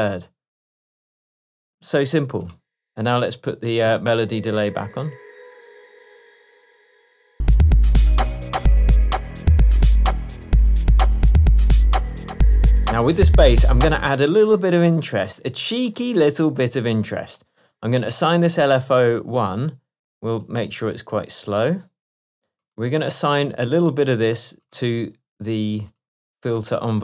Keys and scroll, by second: 4.0 space, 11.2 super+s, 14.1 space.